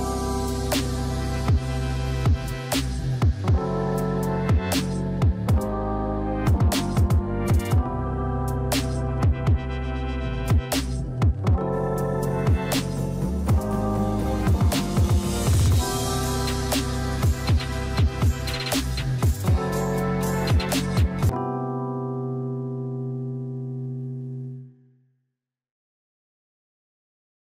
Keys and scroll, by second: 12.1 KP_1, 12.2 KP_5, 12.5 KP_0.